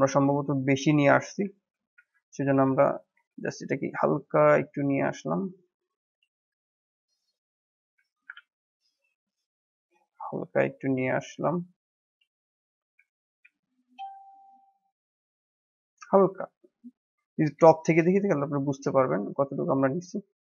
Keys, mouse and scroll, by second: 0.7 middle click, 1.2 scroll down 2, 1.5 shift+middle click, 1.9 ctrl+z, 3.1 s, 6.8-8.1 middle drag, 8.1 e, 13.4 s, 15.3-16.3 middle drag, 16.3 s.